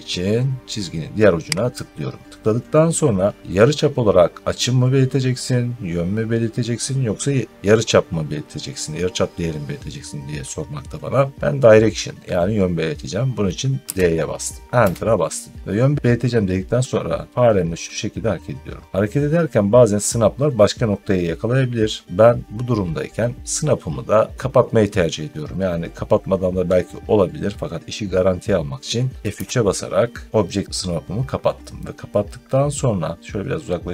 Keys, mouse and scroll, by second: 1.6 click, 13.8 d, 14.7 Return, 18.9 middle click, 21.0 scroll up 3, 29.2 F3, 32.8 middle click, 32.9 middle click.